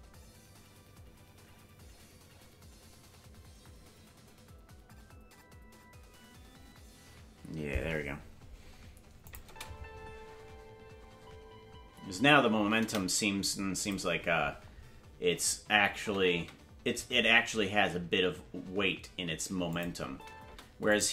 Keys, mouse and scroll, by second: 9.2 drag, 9.4 space, 13.8 click, 15.9 space, 17.9 space, 19.7 click, 20.1 space, 20.5 space, 20.9 click.